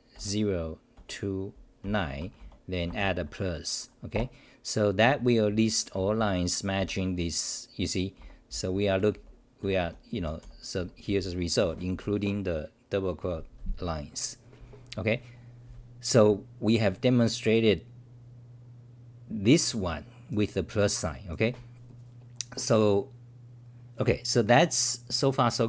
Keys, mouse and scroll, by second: 2.2 Home, 2.4 typing, 4.1 Return, 5.5 w, 6.0 t, 7.9-12.4 typing.